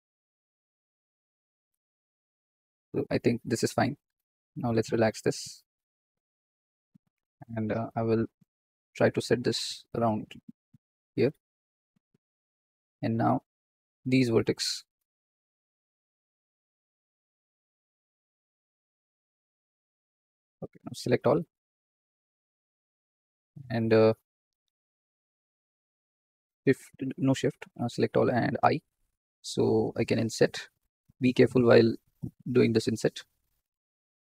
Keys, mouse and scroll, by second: 0.1 g, 0.9 click, 1.4 g, 2.2-2.7 scroll down 6, 2.8 shift+middle click, 3.2 scroll up 3, 4.3 click, 5.7 g, 7.2 click, 9.1 click, 10.1 g, 11.6 click, 13.5 click, 14.0 shift+click, 14.4 shift+click, 15.2 shift+click, 15.8-17.0 shift+drag, 17.1 shift+middle click, 17.9 shift+click, 18.2 shift+click, 18.7 g, 20.3 scroll down 2, 22.1 a, 23.7-25.7 drag, 27.4 scroll down 2, 27.9 shift+middle click, 28.2 scroll up 2, 34.0 shift+middle click.